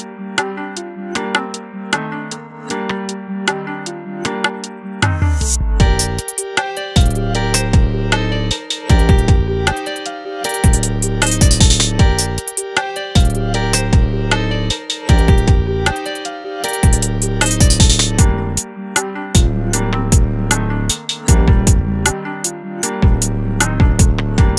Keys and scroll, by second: 4.5 alt+Tab, 6.5 alt+Tab, 6.9 space.